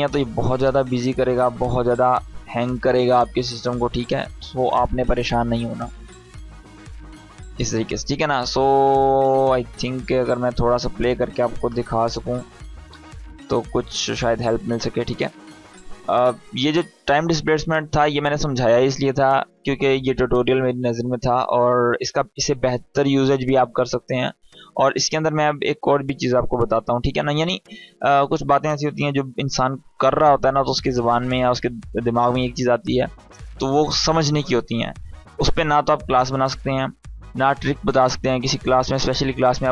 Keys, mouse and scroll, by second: 1.4-2.0 drag.